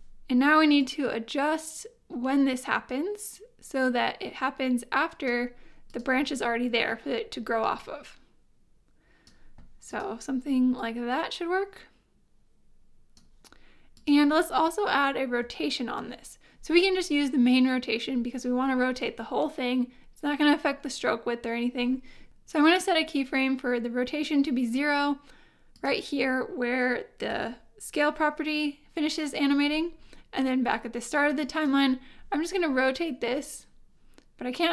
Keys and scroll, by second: 15.4 r, 22.2 r, 27.3 u.